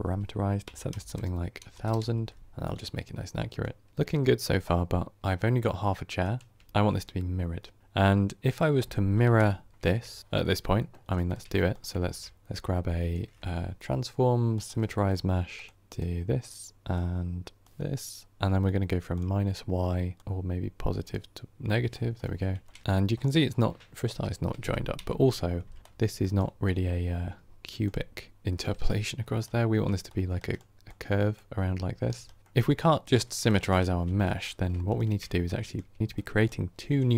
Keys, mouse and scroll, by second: 1.8 KP_0, 3.9-9.1 middle drag, 9.1 KP_7, 9.7-15.5 shift+middle drag, 17.6-22.1 drag, 22.1-24.8 middle drag, 24.8 KP_7, 26.5-28.8 drag, 28.8-30.7 right drag, 30.7-31.9 drag, 32.0 right click, 32.4-33.8 middle drag, 33.8 ctrl+x, 34.9 ctrl+shift+click.